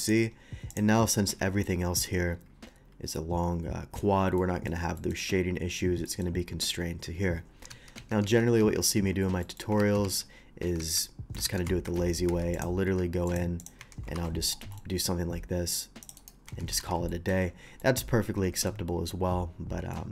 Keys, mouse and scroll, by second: 0.0 alt+v, 0.0 click, 0.7 click, 1.6-2.0 middle drag, 4.3 middle click, 4.9 middle click, 6.0 middle click, 7.7 ctrl+z, 8.0 ctrl+z, 9.0 ctrl+z, 9.0 middle click, 9.4 middle click, 9.8 ctrl+z, 11.4 ctrl+shift+z, 11.8 Tab, 12.2 Tab, 12.5 click, 12.8 q, 13.2 click, 13.6 click, 13.7 Tab, 14.2 ctrl+r, 14.4 middle click, 15.6 middle click, 16.0 click, 16.2 right click, 16.4 Tab, 16.8 shift+2, 17.1 middle drag, 17.5 middle click, 17.8 middle click, 19.9 middle click.